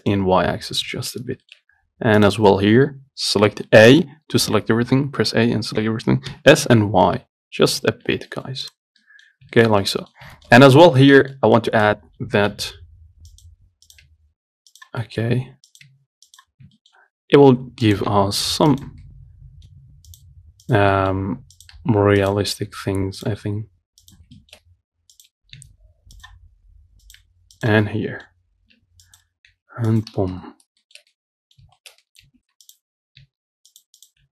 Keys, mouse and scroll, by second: 0.4 Tab, 0.6-1.2 scroll down 5, 1.2 shift+middle click, 1.5 scroll up 1, 1.7 shift+middle click, 2.4 click, 2.7 Tab, 4.1 a, 6.5 s, 8.1 Tab, 8.3 scroll down 2, 8.5 middle click, 8.9 click, 9.3 middle click, 9.5 scroll up 1, 9.8 shift+middle click, 10.4 scroll up 1, 10.6 shift+middle click, 10.9 click, 11.1 Tab, 11.2 scroll up 2, 11.5 shift+middle click, 12.0 click, 12.8 g, 14.1 click, 14.3 g, 15.3 middle click, 16.0 click, 16.1 g, 16.8 scroll down 2, 17.0-18.1 shift+middle drag, 18.1 click, 18.4 g, 19.3-20.4 middle drag, 20.4 click, 20.5 g, 21.2 middle click, 21.8 click, 22.0 g, 22.8-23.5 scroll down 2, 23.5 click, 23.6 g, 24.6 shift+middle click, 24.9-25.4 scroll up 1, 25.4 click, 25.8 g, 27.3 click, 27.4 g, 28.1 middle click, 28.6-29.3 scroll down 1, 29.3 click, 29.7 g, 30.6 Tab, 30.8 scroll up 1, 31.1-32.4 shift+middle drag, 32.4 Tab, 32.9 click, 33.4 g, 34.2 click.